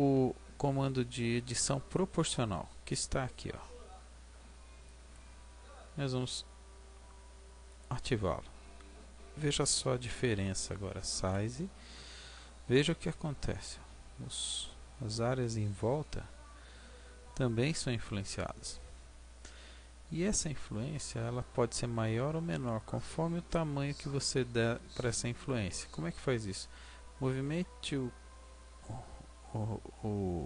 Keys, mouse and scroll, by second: 4.9 click, 11.1 s.